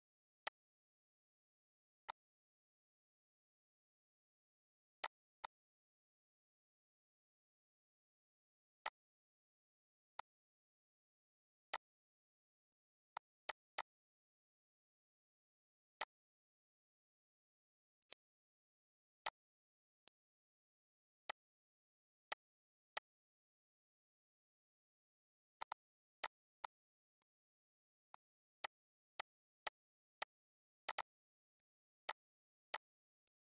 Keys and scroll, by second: 7.6 ctrl+q, 14.9 Delete.